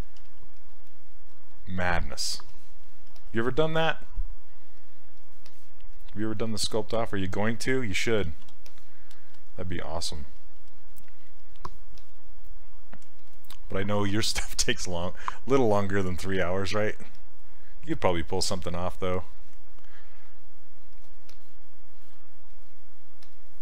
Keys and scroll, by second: 0.2 s, 3.1 s, 8.3 ctrl+z, 16.3 s.